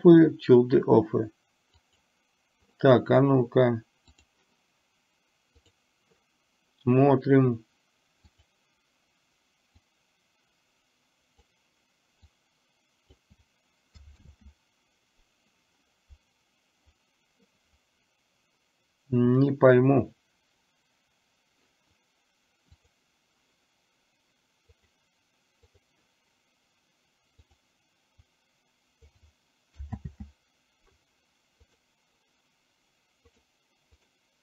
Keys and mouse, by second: 2.0 click, 4.4 click, 8.5 click, 9.9-11.5 drag, 12.4-13.4 drag, 14.4 ctrl+z, 22.9 click, 24.9 click, 27.5 click, 28.4 click, 30.1 ctrl+z, 31.7 click, 33.4 click.